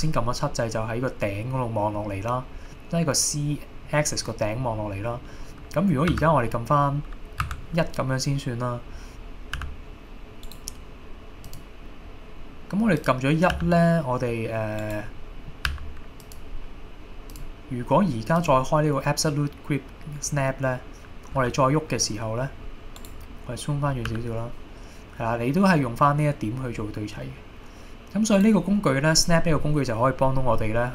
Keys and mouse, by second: 2.8-3.9 middle drag, 4.8 middle click, 5.6 middle click, 6.1 KP_2, 7.5 KP_1, 9.6 g, 10.5 right click, 11.6-13.3 drag, 13.6 g, 14.8 right click, 15.7 g, 16.3 click, 17.4-18.7 drag, 21.4 g, 23.0 right click, 24.1 g, 28.4-30.9 right drag.